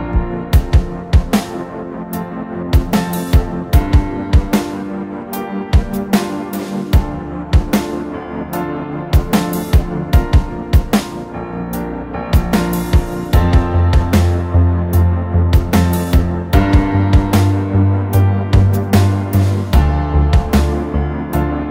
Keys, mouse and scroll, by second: 0.0-2.7 typing, 1.1 scroll down 2, 4.0 middle click, 4.6 typing, 4.8 drag, 7.2-7.9 typing, 11.8 typing, 13.4 typing, 14.3 middle click, 14.3 scroll down 1, 16.7 Escape, 16.9-17.6 typing, 19.6-20.4 typing.